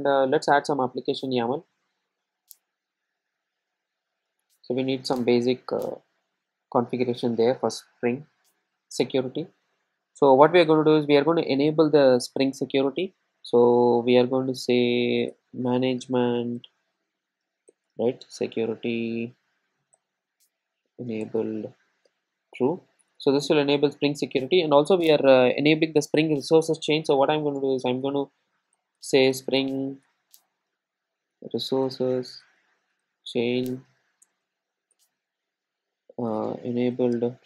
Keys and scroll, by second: 18.1 Tab, 30.1 Tab.